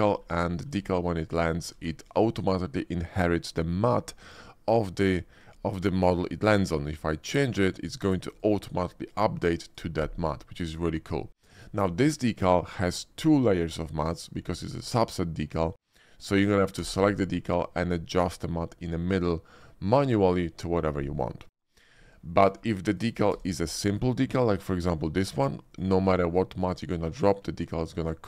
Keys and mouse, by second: 0.4 shift+middle drag, 0.8 middle click, 1.5 shift+middle click, 2.2 shift+middle click, 5.6 shift+middle click, 6.3 shift+middle drag, 8.2 click, 9.1-9.8 drag, 12.6-15.2 drag, 16.8 d, 21.5 click, 22.3 shift+drag, 22.9 click, 23.3 d, 26.1 shift+click, 28.0 click.